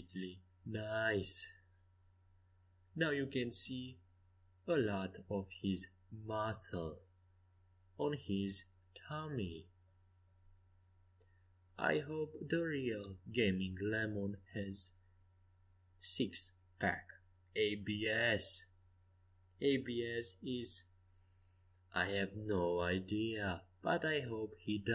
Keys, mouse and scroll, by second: 1.0 Escape, 1.4 a, 3.4-4.8 middle drag, 7.8 a, 8.6 a, 13.5 z, 14.8-16.7 right drag, 16.7-18.4 drag, 17.4-19.1 right drag, 19.1 KP_5, 19.2 KP_1, 19.7 KP_3, 19.9 KP_5, 21.4 middle click, 23.7 e.